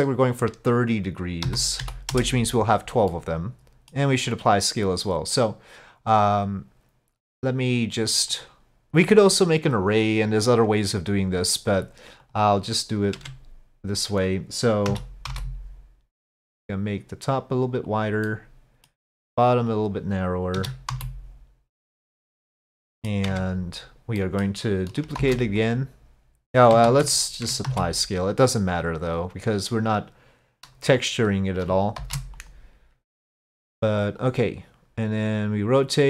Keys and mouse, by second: 0.5-2.4 drag, 3.1-4.0 middle drag, 8.3 right click, 12.3 click, 13.3 Tab, 14.9 s, 18.3 middle click, 19.7 click, 20.6 s, 22.8 click, 23.3 Tab, 24.2 click, 25.2 shift+d, 26.9 ctrl+z, 27.7 ctrl+a, 32.0 shift+d, 34.3-36.0 drag.